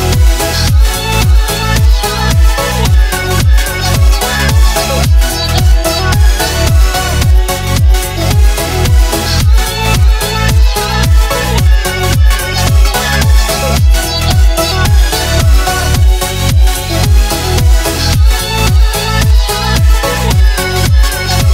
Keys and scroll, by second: 0.9 shift+a, 1.5 s, 3.9 Tab, 4.2 i, 5.1 a, 7.8-9.1 typing, 10.2 shift+d, 10.6 y, 11.6 a, 12.1 Tab, 14.2 Tab.